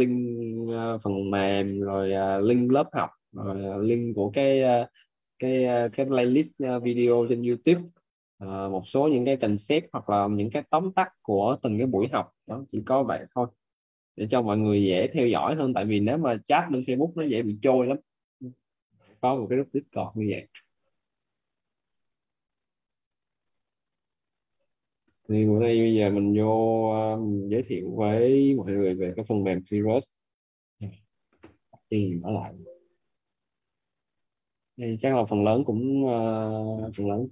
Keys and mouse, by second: 22.3 click, 26.5 click, 30.2 click, 33.0 click.